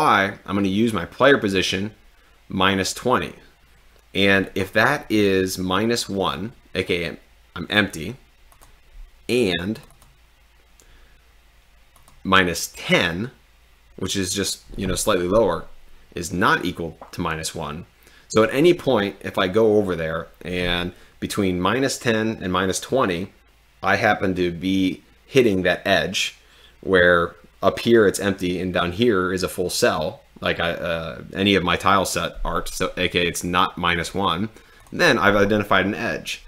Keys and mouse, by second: 8.5 click, 10.1 click.